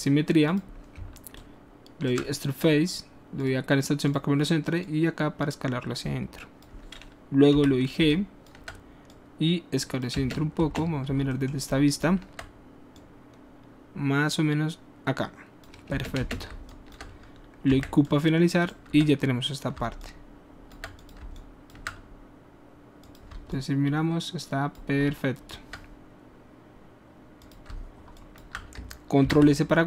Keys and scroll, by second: 7.6 g, 10.1 space, 16.0 space, 16.5 alt+space, 17.7 q, 29.2 ctrl+alt+s.